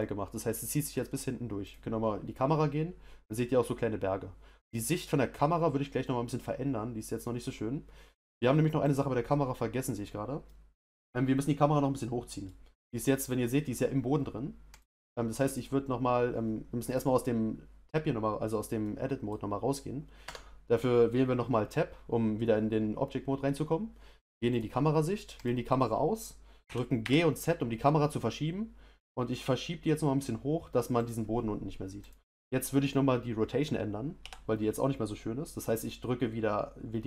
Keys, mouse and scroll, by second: 1.6 click, 8.2 click, 8.8 click, 9.8 click, 10.4-13.2 middle drag, 13.2 click, 14.7 click, 16.8 click, 18.8-20.4 middle drag, 20.4 Tab, 24.5 click, 25.4 click, 26.7 g, 32.0 click, 34.2 r.